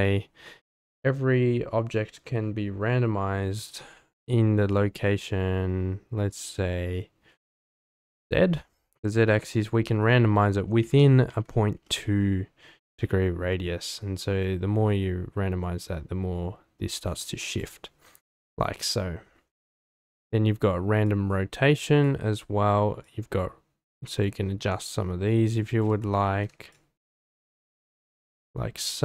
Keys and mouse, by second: 8.2-11.8 drag, 14.2-17.7 drag, 18.2-19.1 middle drag, 21.0-22.1 drag, 23.0-25.9 drag, 26.3 ctrl+z, 26.7-29.0 drag.